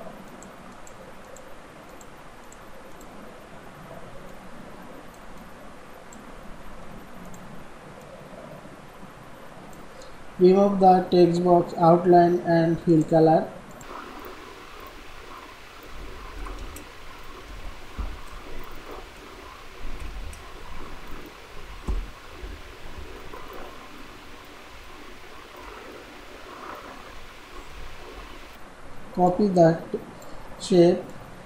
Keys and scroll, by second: 6.6 ctrl+e, 16.2 ctrl+a, 16.4 ctrl+shift+,, 17.4 ctrl+a, 17.8 ctrl+shift+,, 19.3 shift+F3, 19.9 ctrl+shift+,, 20.6 ctrl+b, 21.8 ctrl+shift+,, 22.9 ctrl+b, 27.7 ctrl+z.